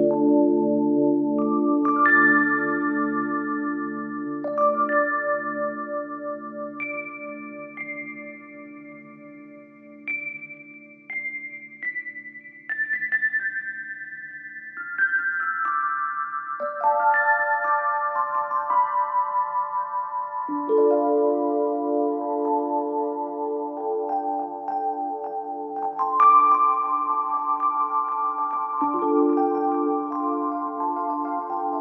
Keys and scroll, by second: 3.6 ctrl+z, 11.2 Escape.